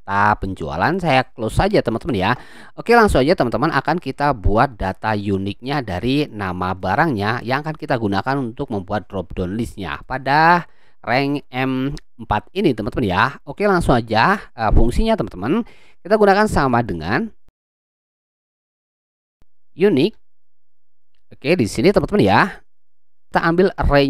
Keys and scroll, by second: 16.6 =, 19.7-20.9 typing.